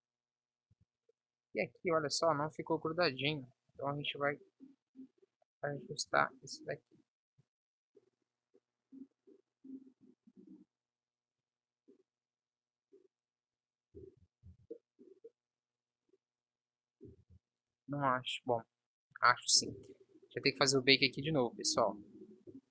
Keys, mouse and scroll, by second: 1.8 b, 14.2 ctrl+s, 14.6 z, 17.4 ctrl+s, 17.9 Tab, 19.7 t, 21.4 Tab, 21.9 a.